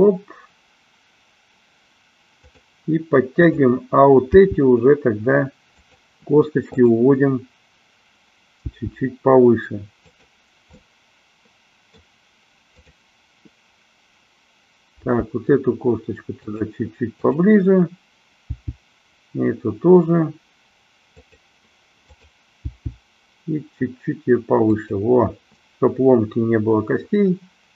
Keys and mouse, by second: 3.4-4.5 drag, 4.7 g, 5.9 click, 6.8-8.0 drag, 8.8 g, 10.3 click, 10.8-12.2 middle drag, 12.8 click, 15.3 g, 17.3-18.4 drag, 18.7 g, 21.4 click, 22.2-23.4 drag, 23.8 g, 24.9 click.